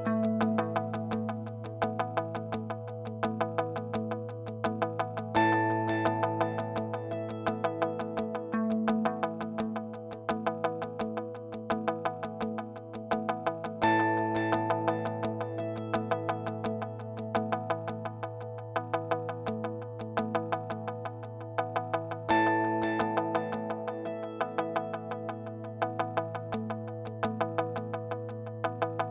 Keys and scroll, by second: 11.3-13.0 typing, 13.3 Return.